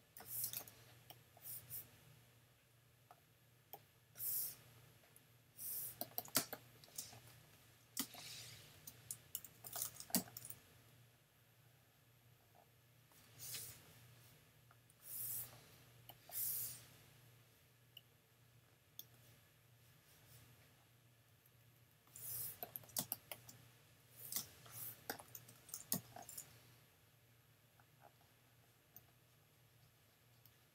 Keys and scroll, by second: 0.2 super+j, 6.4 super+space, 7.3 space, 8.0 space, 9.4 super+-, 10.2 super+n, 23.0 super+space, 24.3 space, 25.9 n.